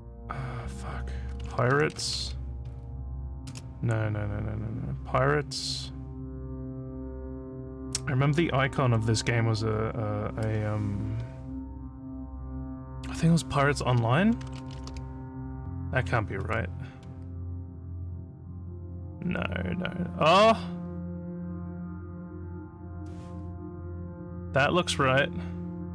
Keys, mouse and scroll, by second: 1.4-3.5 typing, 14.9 e.